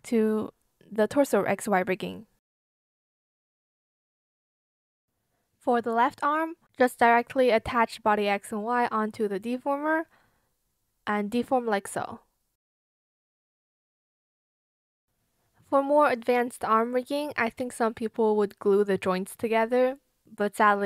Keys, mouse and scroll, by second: 0.0 shift+click, 1.2 shift+click, 1.7 ctrl+z, 2.5 shift+click, 2.8 shift+click, 3.9 Return, 4.9 Return, 6.6-7.5 typing, 7.4 shift+click, 9.5 shift+click, 9.9 shift+click, 10.4 shift+click, 11.2 shift+click, 11.6 ctrl+z, 11.8 shift+click, 12.0 shift+click, 12.4 shift+click, 12.8 shift+click, 12.9 space, 13.0 click, 13.6 shift+click, 14.8 shift+click, 15.1 shift+click, 16.1 shift+click, 16.4 shift+click, 18.8 shift+click, 19.2 shift+click, 19.4 shift+click, 19.7 ctrl+z, 20.5 shift+click, 20.6 shift+click.